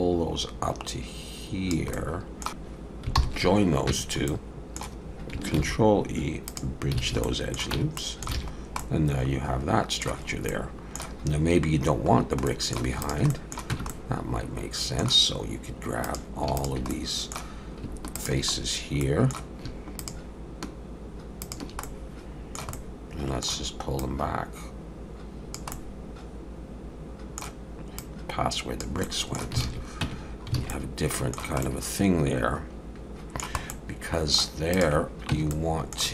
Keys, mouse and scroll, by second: 1.9 middle click, 2.5 shift+click, 3.2 ctrl+j, 3.9 Tab, 4.3 middle click, 5.6 ctrl+e, 7.0 alt+a, 7.2 middle click, 7.7 Tab, 8.0 middle click, 8.4 alt+a, 8.6 scroll down 1, 8.8 middle click, 10.3 scroll up 2, 10.5 middle click, 12.2 scroll down 1, 12.5 middle click, 13.0 click, 13.3 middle click, 13.7 Tab, 13.9 middle click, 16.0 click, 16.6 shift+click, 16.9 middle click, 18.2 shift+click, 18.6-18.9 scroll down 2, 19.0 middle click, 20.0 shift+click, 21.8 middle click, 22.8 middle click, 24.0 click, 25.7 middle click, 28.0 click, 29.0 middle click, 29.6 alt+a, 30.0 Tab, 30.3-30.6 scroll up 2, 30.6 alt+a, 30.7 middle click, 31.6 scroll up 1, 31.6 middle click, 33.7 middle click, 34.7 click, 35.3 Tab, 35.5 middle click.